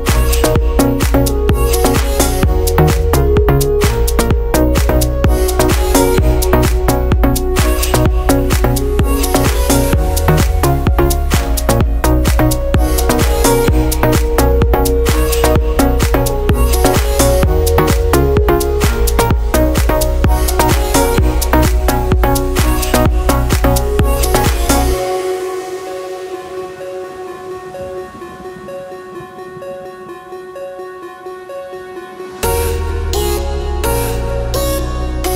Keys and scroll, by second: 12.4 ctrl+z, 15.6 ctrl+z, 21.3 ctrl+z, 30.4 ctrl+z.